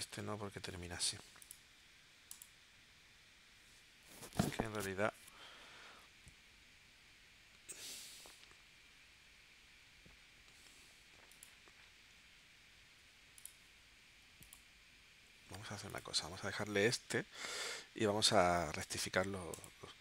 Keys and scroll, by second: 18.6 space.